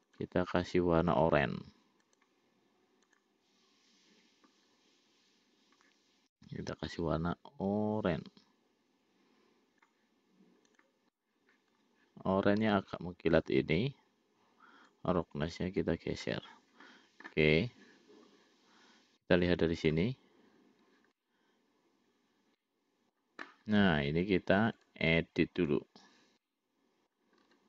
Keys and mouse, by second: 0.3-3.0 drag, 15.2-16.9 drag, 20.8 click, 21.6-23.6 middle drag, 25.2-26.3 drag, 26.8 middle click.